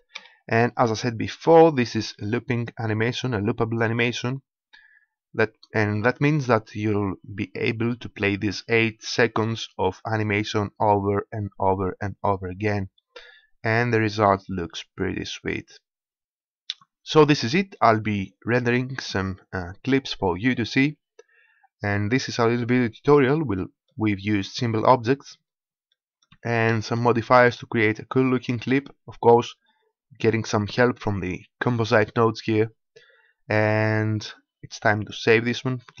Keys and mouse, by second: 0.0 Escape, 17.1-19.4 drag, 34.7-36.0 drag.